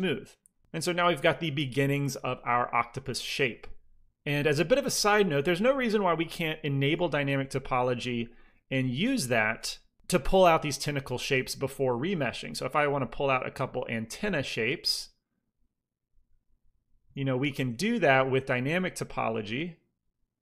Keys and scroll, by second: 4.0 ctrl+z, 6.8 ctrl+d, 11.0 f, 11.9 f, 13.8 f, 17.3 i, 17.3 f, 18.1 f.